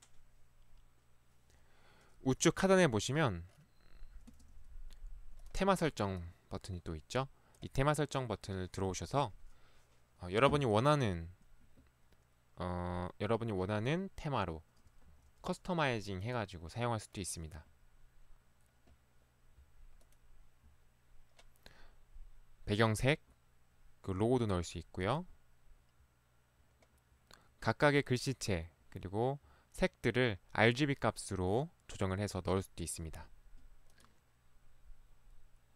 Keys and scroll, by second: 4.4 ctrl+1, 5.6 ctrl+1, 15.1 Escape.